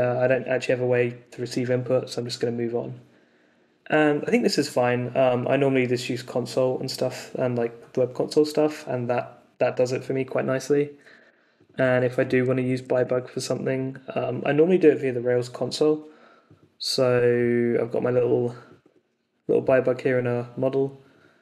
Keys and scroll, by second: 12.6 d, 13.0 super+s.